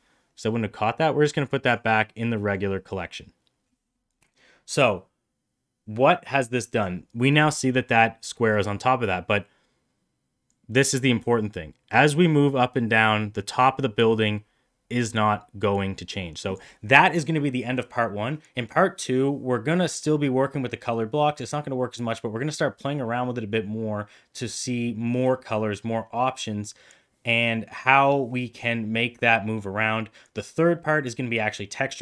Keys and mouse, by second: 0.5-1.6 drag, 2.2 middle drag, 10.4-16.5 drag.